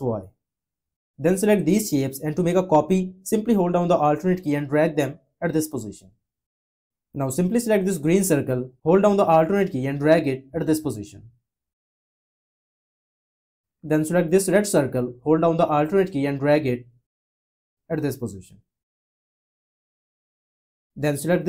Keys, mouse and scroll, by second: 3.8 alt+click, 15.2 alt+click.